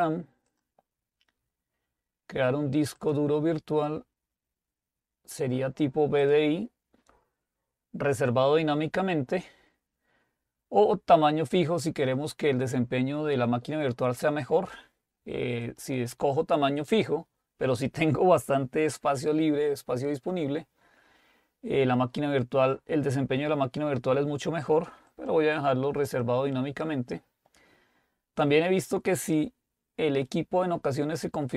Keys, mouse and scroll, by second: 0.5 click, 3.0 click, 6.4 click, 15.7 click, 25.7 click.